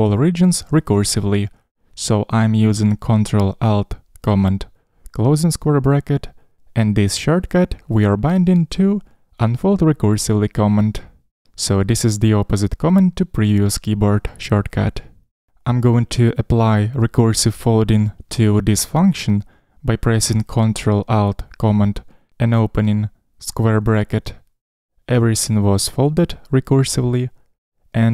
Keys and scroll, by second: 23.0 ctrl+alt+super+[.